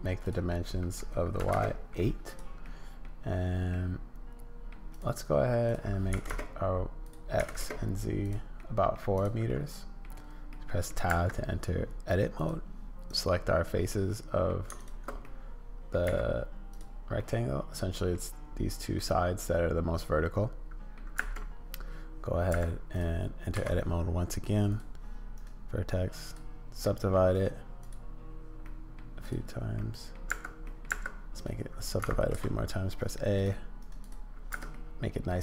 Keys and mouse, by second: 0.3-2.0 middle drag, 2.3 middle click, 2.6 middle click, 3.7-4.7 middle drag, 4.9 click, 5.7-6.8 drag, 7.0-8.1 drag, 8.6 middle click, 9.2 click, 9.5 middle click, 10.0 middle click, 10.6 middle click, 11.1 Tab, 12.4 middle click, 13.9 middle click, 15.2 middle click, 16.0 x, 17.2 middle click, 19.0-20.9 middle drag, 21.1 Tab, 22.5 Tab, 23.5 a, 24.7 click, 25.3-26.4 drag, 26.9 click, 27.3 click, 28.6 click, 29.7 click, 30.3 Tab, 30.6 click, 30.9 Tab, 31.3-33.4 drag, 32.3 a, 33.8 click, 34.5 Tab, 34.7 click.